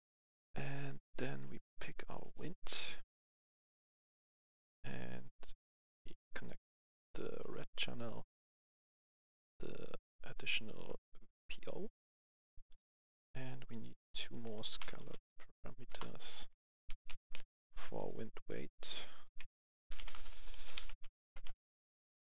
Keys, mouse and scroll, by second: 1.2-4.2 drag, 4.2-5.3 right drag, 5.5 right click, 6.1-11.4 drag, 11.7-14.1 right drag, 14.5 s, 14.7 c, 15.0 a, 15.8 Return, 16.8 ctrl+c, 17.0 ctrl+v, 17.9 click, 20.2-22.3 typing.